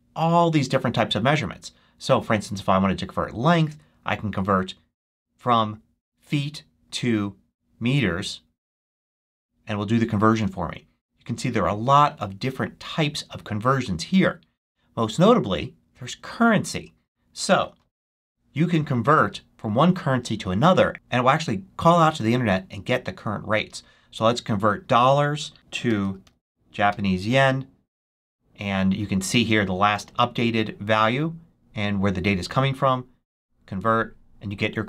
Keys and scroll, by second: 17.9 1.